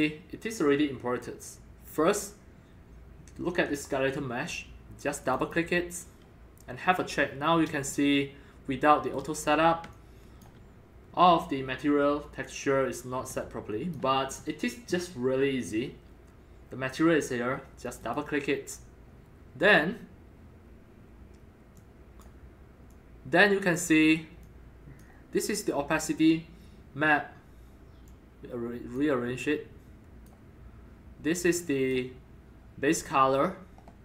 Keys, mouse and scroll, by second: 0.4-0.8 scroll up 1, 0.8 scroll, 5.2 click, 6.9 scroll, 7.1 scroll up 3, 8.0-9.9 middle drag, 9.9 alt+click, 10.4 alt+shift+middle click, 10.6-12.8 alt+drag, 13.3 alt+click, 16.2 drag, 17.8 click, 18.0 click, 21.7 click, 22.9 click, 24.4-25.0 drag, 28.1-29.0 drag, 29.4-30.3 drag, 31.5 click, 33.3-34.0 drag.